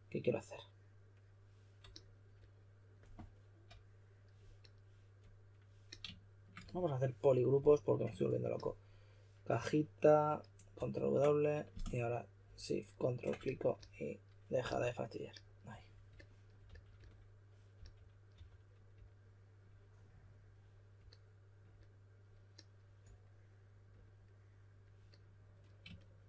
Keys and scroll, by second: 0.0-0.1 typing, 10.7 super+w, 14.6 s, 16.6 s, 17.7-18.8 typing.